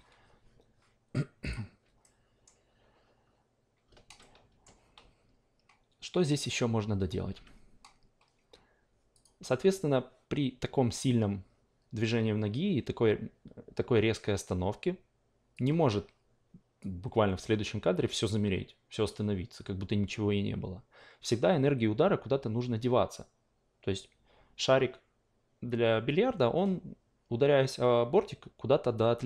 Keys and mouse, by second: 1.4 click, 2.0 alt+middle click, 4.2-7.3 alt+middle drag, 7.3 a, 9.1 click, 10.9 click, 15.5 click, 17.3-29.2 drag.